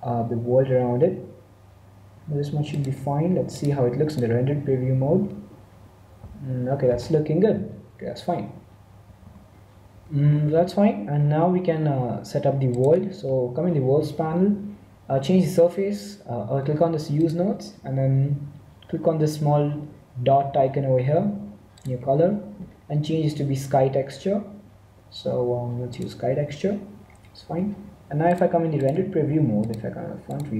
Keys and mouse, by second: 3.4-5.3 drag, 9.1 z, 9.2 z, 10.1-12.3 middle drag, 12.6-14.4 drag, 17.1-18.9 drag, 21.7-23.4 drag, 27.0-28.2 middle drag, 28.2-29.3 drag, 30.3-30.5 drag.